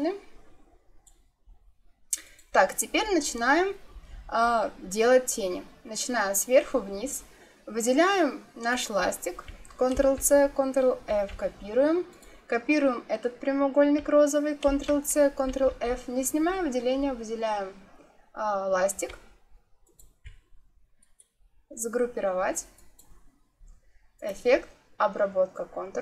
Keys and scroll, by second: 9.9 ctrl+c, 11.0 ctrl+f, 14.6 ctrl+c, 15.4 ctrl+f.